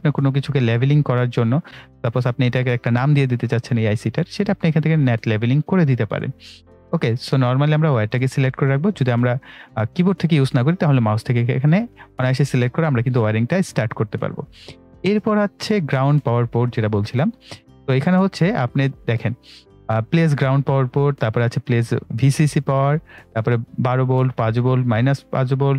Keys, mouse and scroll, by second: 1.6 click, 2.1 right click, 7.1 click, 10.3 right click, 17.8-20.8 drag.